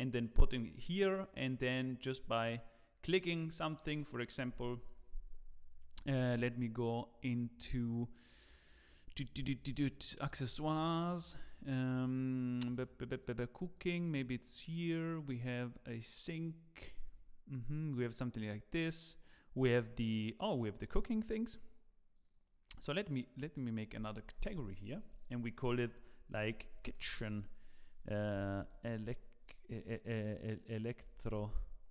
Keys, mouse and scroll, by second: 9.6 click, 13.7 click, 22.1 click, 23.6 click, 23.6 right click, 25.1 click, 25.7 click.